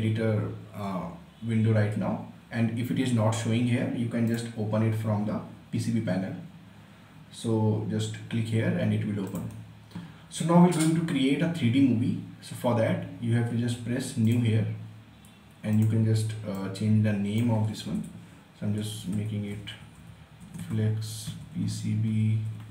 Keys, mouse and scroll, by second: 4.3 click, 9.4 click, 14.3-18.9 drag, 19.0-22.7 typing.